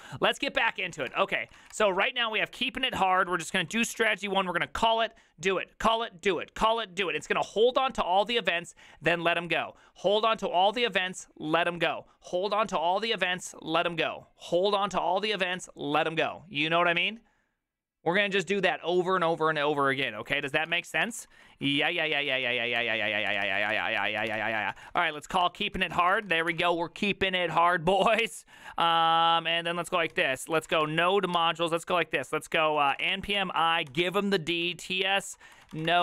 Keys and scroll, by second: 0.8 alt+{, 0.8 ctrl+c, 0.9 ctrl+:, 1.1-3.5 typing, 1.2 Return, 1.2 ctrl+d, 20.3-26.4 typing, 26.5 Return, 27.9 ctrl+a, 28.2 ctrl+a, 28.6 ctrl+a, 28.9 ctrl+a, 29.9-31.3 typing, 31.4 ctrl+c, 32.5-36.0 typing.